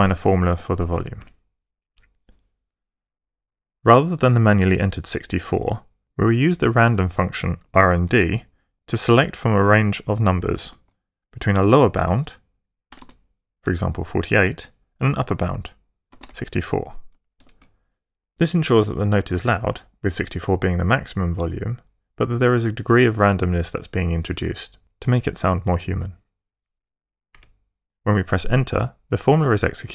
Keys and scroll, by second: 1.2 =, 7.6-8.7 typing, 10.6 shift+9, 12.7-13.6 typing, 15.9-17.4 typing, 27.2 Return.